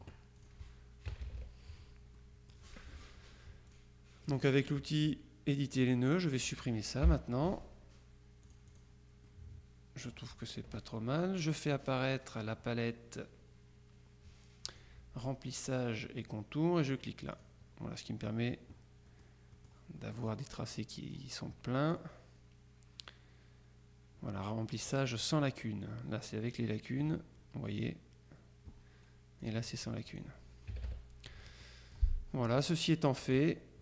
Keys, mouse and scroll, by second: 0.4 click, 1.2 KP_Subtract, 2.3 click, 3.8-4.9 drag, 6.0-7.0 drag, 7.2 Delete, 8.5 click, 10.4 click, 14.8 click, 17.4 click, 19.2-20.2 drag, 26.6 click, 29.5 click, 30.2 click, 30.8 KP_Subtract, 31.7 click, 33.4 click.